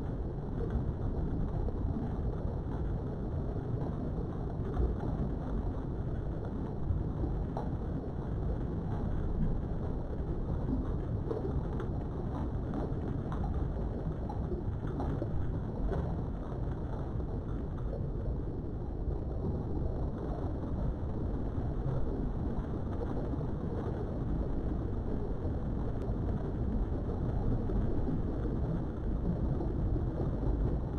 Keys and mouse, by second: 0.9 j, 2.3 shift+click, 3.2 j, 5.1 3, 5.4 click, 7.3 i, 10.3 click, 12.0 g, 12.6 x, 17.5 click, 17.9 middle click, 18.7 Tab, 19.1 middle click, 20.2-21.3 middle drag, 21.4 Tab, 22.5 g, 23.0 x, 25.3 click, 25.7 middle click, 27.4 ctrl+z, 27.7 middle click, 28.9 g, 29.3 x.